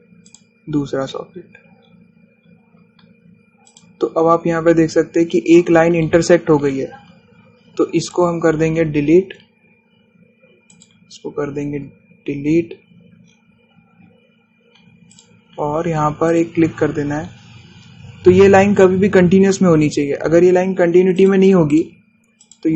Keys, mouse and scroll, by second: 1.1 scroll up 1, 2.4-3.0 scroll down 1, 3.5-4.7 scroll up 1, 4.7 click, 5.4-5.7 scroll up 1, 9.1 click, 11.8 click, 12.4-13.8 scroll down 1, 14.4-15.1 scroll down 1, 16.2 click, 18.1 scroll down 1, 20.8 scroll up 1, 20.9-21.7 scroll down 1, 22.3 click.